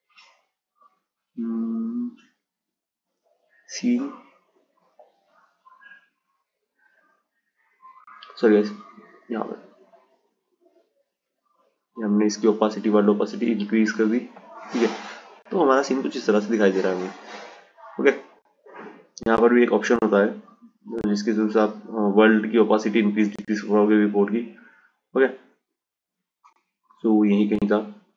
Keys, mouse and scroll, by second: 1.7 click, 4.0 click, 6.2 click, 8.1-11.1 drag, 12.6 drag, 17.8 click, 19.1 click, 20.6-24.3 drag, 26.4 click, 27.2-28.1 drag.